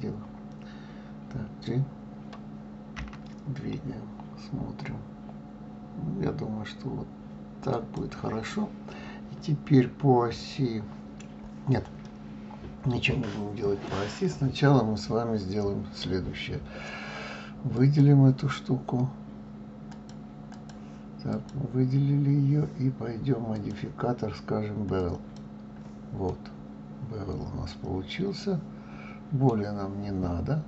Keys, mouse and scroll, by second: 3.0 g, 12.0-14.5 middle drag, 14.5 scroll up 2, 15.0-17.7 scroll down 1, 17.7 click, 19.9-21.5 drag, 23.5-26.3 drag, 26.3-29.3 middle drag, 30.2-30.6 scroll up 2.